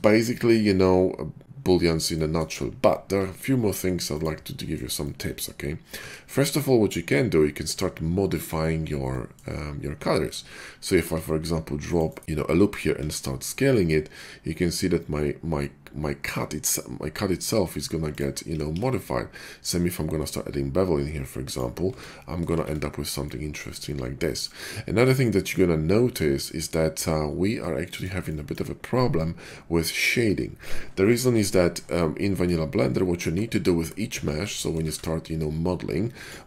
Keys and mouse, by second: 4.8-5.2 shift+middle drag, 5.2-9.0 drag, 5.9 Tab, 9.0-10.3 middle drag, 10.9 ctrl+r, 12.9 s, 15.8-18.1 drag, 18.7 ctrl+b, 21.8 Tab, 22.4 shift+middle click, 22.4 shift+2, 22.6-23.3 middle drag, 23.4 middle drag, 23.6-25.8 drag, 25.8-32.5 middle drag, 34.1 a, 34.3 x, 34.8 shift+a.